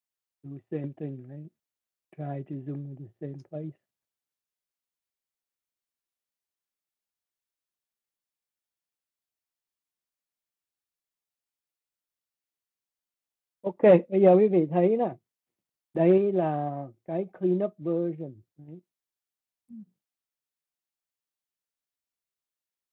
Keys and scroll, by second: 3.4 z.